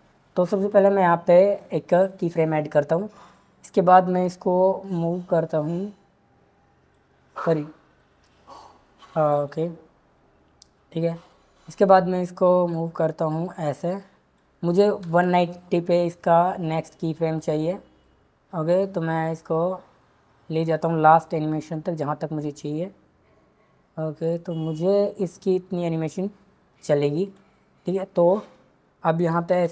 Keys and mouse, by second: 2.0 click, 4.2 click, 9.4 click, 11.3 click, 15.0 Left, 18.1-19.2 drag, 22.4-26.2 drag, 27.2 click, 29.5 shift+Left.